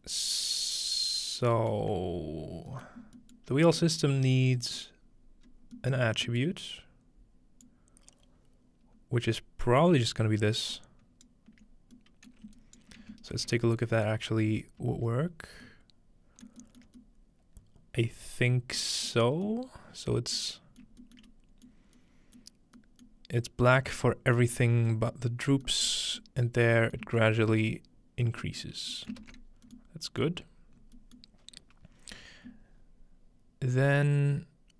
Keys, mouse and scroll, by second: 1.8-2.8 middle drag, 2.0-3.0 scroll up 2, 2.9 middle drag, 3.0-4.6 scroll down 2, 3.4-3.8 middle drag, 4.6-5.5 scroll down 2, 4.8-5.8 middle drag, 5.5 scroll up 2, 5.6 scroll down 2, 7.6-10.1 drag, 11.8 click, 11.8-14.0 right drag, 12.3-14.1 shift+middle drag, 13.3 ctrl+space, 14.8 z, 16.9 shift+middle click, 18.5 middle click, 19.2 middle click, 19.4-20.1 scroll up 1, 20.1 middle click, 20.1-20.8 scroll up 1, 20.9 shift+middle click, 21.3 shift+middle click, 21.8 shift+middle click, 22.4 shift+middle click, 22.9-23.5 scroll up 2, 23.1-23.8 middle drag, 23.5-25.1 scroll down 1, 24.0 middle click, 24.6 middle click, 25.1 middle click, 26.6 middle click, 27.0 shift+middle drag, 27.4 shift+middle click, 27.7-28.4 shift+middle drag, 28.8 middle click, 29.1-30.1 ctrl+middle drag, 29.7-32.3 scroll up 1, 32.3-32.6 scroll up 1, 32.8-34.5 scroll down 2, 34.5 scroll down 1.